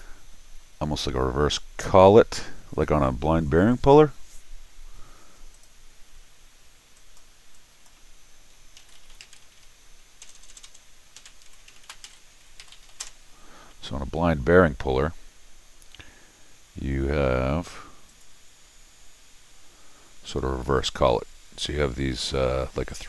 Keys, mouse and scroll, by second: 5.5 click, 6.9 click, 7.5 click, 8.5-13.4 typing, 18.1 click, 22.9 click.